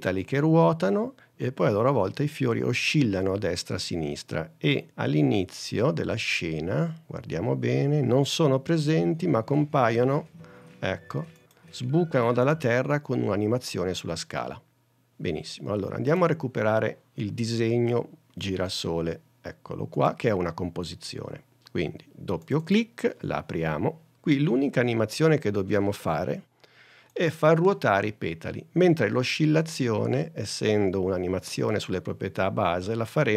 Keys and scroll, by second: 26.2 space.